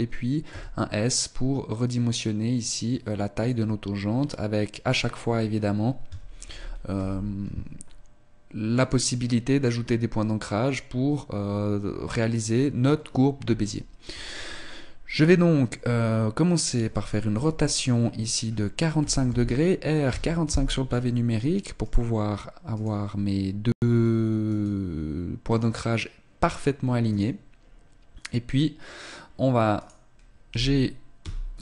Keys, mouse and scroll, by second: 0.6 s, 6.6 ctrl+z, 7.2 ctrl+z, 8.8 right click, 14.3 right click, 17.4 r, 21.0 scroll up 2, 21.6 right click, 22.9 right click, 24.4 right click, 25.4 right click, 27.1 right click, 29.8 right click, 30.5 g.